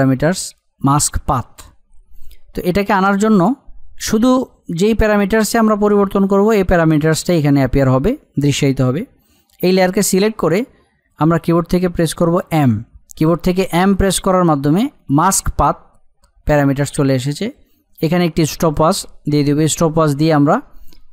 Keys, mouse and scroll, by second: 2.1 click, 9.9 click, 13.0 m, 18.6 click.